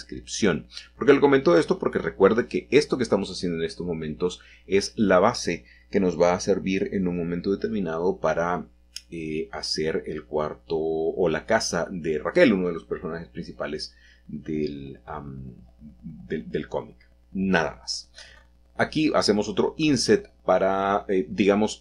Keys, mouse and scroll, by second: 0.0-1.2 shift+drag, 1.3-2.7 typing, 8.6 shift+click, 9.0 middle click, 9.3 click, 12.1 shift+middle click, 12.3-12.9 shift+scroll down 2, 12.6 shift+middle click, 12.9-14.2 scroll up 1, 14.2 a, 14.4 a, 15.4-16.5 drag, 17.9 i, 20.2 click, 21.5 e.